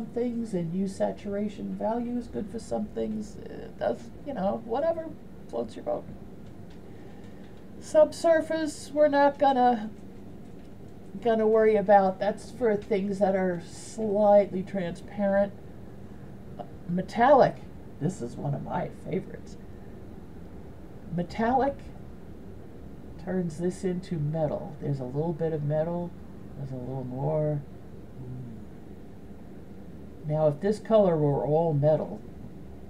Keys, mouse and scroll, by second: 22.0-29.4 drag.